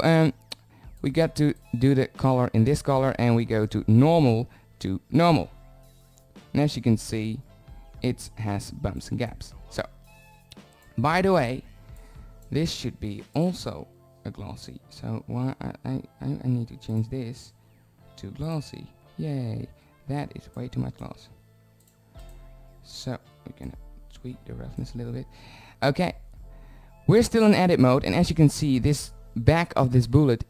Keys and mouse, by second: 2.8 click, 28.3 middle click.